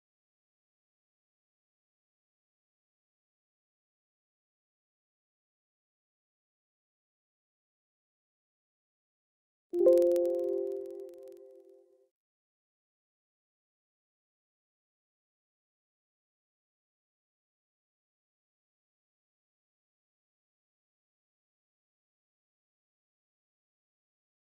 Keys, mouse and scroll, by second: 3.1 click, 7.5-9.2 typing, 9.5 Return, 11.3 right click, 12.8 click, 15.5 right click, 20.7 click.